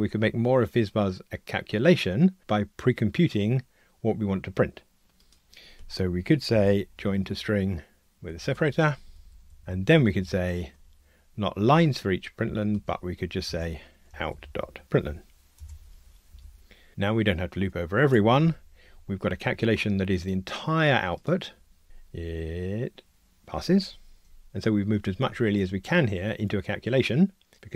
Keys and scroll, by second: 8.1 Tab, 9.2 alt+shift+Left, 15.8 Escape, 21.8 ctrl+r.